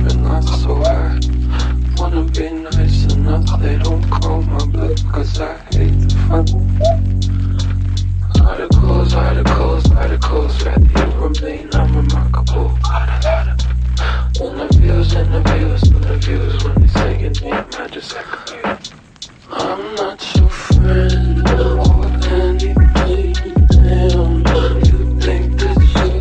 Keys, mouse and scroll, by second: 20.1 ctrl+shift+d, 22.8-24.0 typing, 25.2 typing.